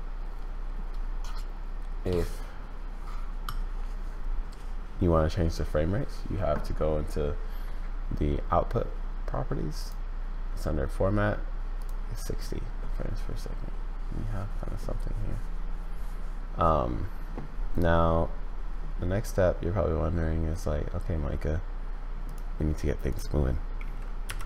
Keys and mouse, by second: 9.8-11.8 drag, 24.2 n.